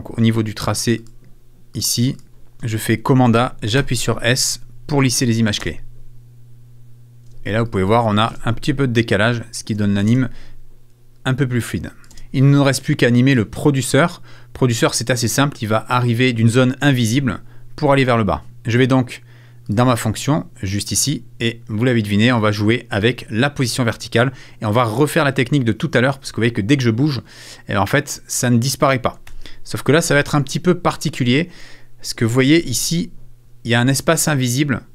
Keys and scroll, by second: 2.5 super+f, 2.9 super+a, 3.8 super+s, 5.6 space, 7.2 space, 9.7 space, 11.7 space, 29.3 super+z.